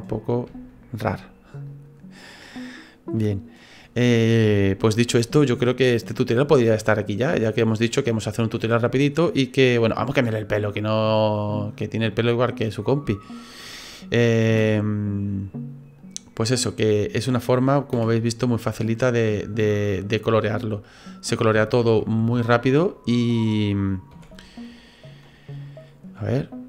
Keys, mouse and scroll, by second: 0.1 right click, 0.7 shift+right click, 1.7 click, 2.9 scroll down 1, 3.2 middle click, 4.0 scroll down 2, 4.5 shift+middle click, 4.9 middle click, 5.7 right click, 6.1 middle click, 7.2 click, 8.4-8.9 scroll down 3, 9.1-9.7 scroll up 5, 9.8 middle click, 11.0 click, 12.1 right click, 12.7-13.6 scroll up 3, 13.1 middle click, 14.5 c, 16.6 click, 17.9 c, 19.7 middle click, 20.4 c, 21.6 shift+middle click, 22.3 shift+right click, 22.5 shift+right click, 22.8 middle click, 24.1 c.